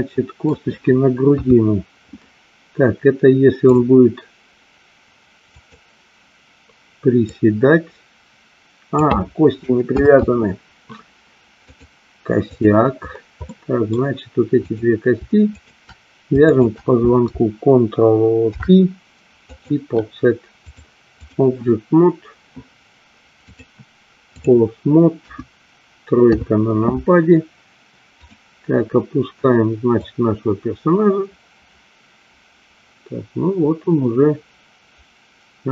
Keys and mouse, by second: 1.4 KP_3, 3.8 click, 7.4-9.2 drag, 10.2 ctrl+z, 11.7-12.9 drag, 13.5 middle click, 14.7 click, 15.7 shift+click, 18.5 ctrl+p, 20.7 click, 23.6-24.6 drag, 25.3 KP_1, 26.4 KP_3, 28.3 click, 30.0-35.7 drag.